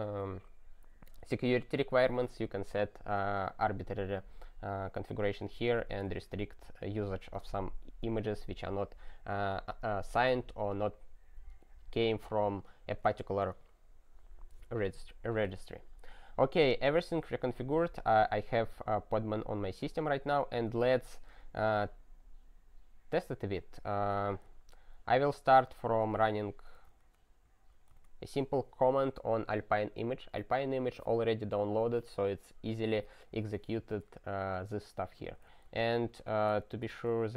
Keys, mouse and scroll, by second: 17.2 super+o, 17.5 super+t, 18.0 super+f, 20.9-23.9 scroll, 24.4 super+f, 26.0 ctrl+r, 26.5-27.4 typing, 27.7 ctrl+e, 28.0 Return, 35.2 ctrl+p, 35.6 alt+b, 36.1 alt+b, 36.5 alt+f, 36.9 ctrl+k, 37.2-37.3 typing.